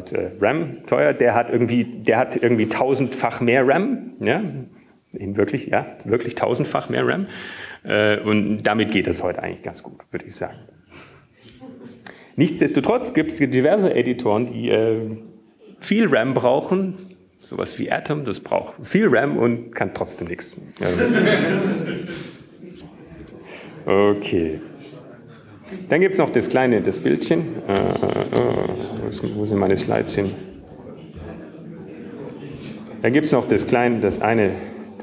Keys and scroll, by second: 30.2 super+q, 31.7 Escape, 32.1 super+`.